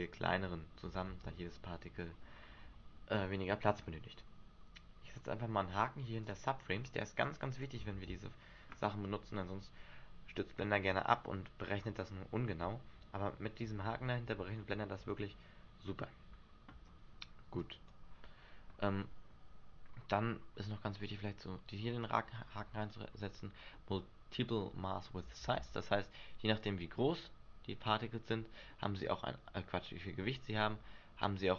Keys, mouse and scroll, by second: 1.2 alt+a, 6.4 click, 7.4 click, 8.1 alt+a, 16.9 alt+a, 17.7 click, 23.0 click, 25.6 alt+a, 28.9 middle click.